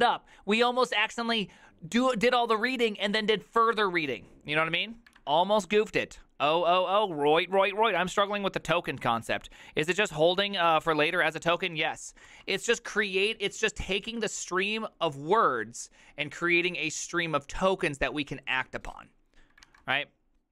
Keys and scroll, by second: 5.3 alt++, 19.8 alt++.